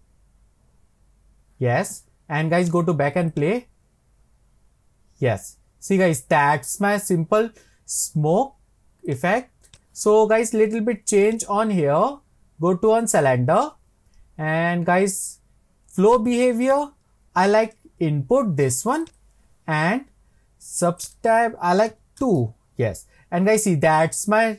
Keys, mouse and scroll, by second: 2.6-6.3 drag, 9.1-11.4 drag, 16.7-19.7 drag, 21.0-24.0 drag.